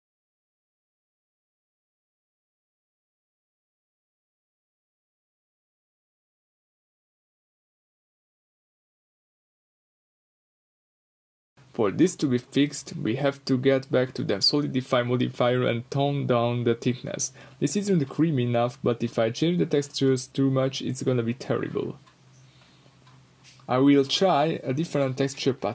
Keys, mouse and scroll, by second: 0.4 Return, 3.2 Return, 3.7-4.5 scroll up 2, 6.0 Return, 6.7-7.6 middle drag, 7.5 scroll up 2, 8.0-9.4 middle drag, 8.9 Tab, 10.0-12.6 middle drag, 11.2 s, 12.6 click, 12.7-17.1 middle drag, 16.5-17.1 scroll down 2, 17.1 click, 17.7 scroll down 2, 17.9 middle click, 18.2-19.1 scroll up 2, 18.5-19.8 middle drag, 19.1 scroll down 2, 19.8-21.8 right drag, 21.8 click, 22.2 scroll up 1, 24.0-25.7 drag, 24.8 Return.